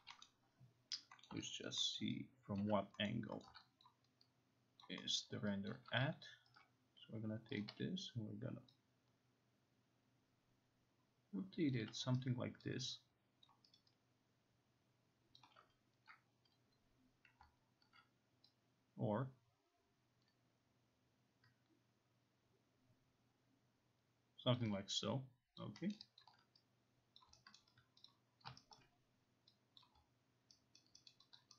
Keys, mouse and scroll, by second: 0.0 alt+click, 0.3 middle click, 1.3 middle click, 1.7 alt+right click, 2.0 alt+middle click, 2.6 alt+right click, 3.1 middle click, 3.5 middle click, 3.9 alt+click, 4.9 alt+click, 5.2 alt+middle click, 5.8 alt+click, 6.6 click, 7.6 click, 11.8 click, 12.7 alt+right click, 13.5 alt+click, 13.5 alt+right click, 14.3 alt+right click, 14.3 alt+click, 15.4 alt+click, 15.4 alt+right click, 17.4 alt+click, 24.6 click, 25.7 alt+click, 26.0 alt+scroll, 26.3 alt+click, 27.2 click, 27.6 alt+right click, 28.1 click, 28.8 alt+right click, 29.8 click, 30.8 alt+right click, 31.1 alt+right click, 31.4 alt+click.